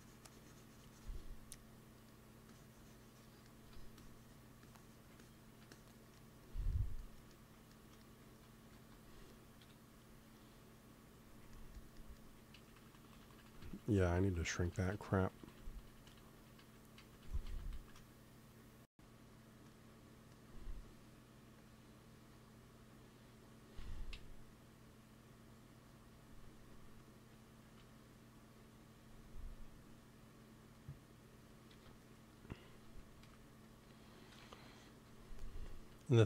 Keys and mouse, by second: 1.5 middle click, 2.4-5.0 drag, 6.1-7.5 drag, 8.1-9.7 drag, 8.6 ctrl+s, 9.7 KP_1, 12.5 ctrl+z, 12.7 ctrl+z, 12.9 ctrl+z, 13.1-13.6 ctrl+z, 13.8 ctrl+z, 14.0 ctrl+z, 14.1 ctrl+z, 14.3 ctrl+z, 14.5 ctrl+z, 14.7 ctrl+z, 14.9 ctrl+z, 15.1 ctrl+z, 15.3 ctrl+z, 15.5 ctrl+z, 15.6 ctrl+z, 15.9 ctrl+z, 16.0 ctrl+z, 16.3 ctrl+z, 16.6 ctrl+z, 17.0 ctrl+z, 17.2 ctrl+z, 17.4 ctrl+z, 17.7 ctrl+z, 18.4-20.6 drag, 23.7 Tab, 24.0 z, 26.3-28.0 right drag, 27.5 z, 27.8 s, 28.0 click, 30.5 click, 30.5 s, 31.6 KP_3, 33.0 g, 34.2 KP_1.